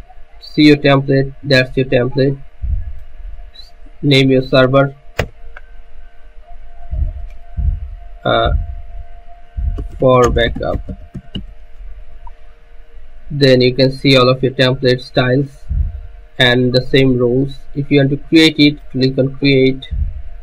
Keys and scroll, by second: 5.3 BackSpace, 9.9-13.3 typing.